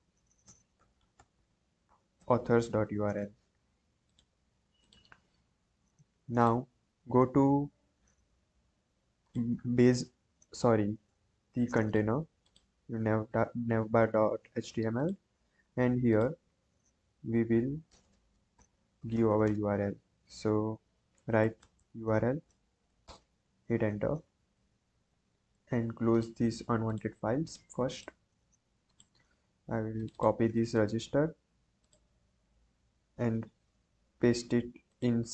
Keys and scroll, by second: 0.1-2.1 typing, 17.2 Right, 17.4 Right, 17.8 BackSpace, 18.5 shift+[, 19.1 BackSpace, 21.1-22.2 typing, 22.6 Down, 23.0 Return, 30.7 ctrl+c.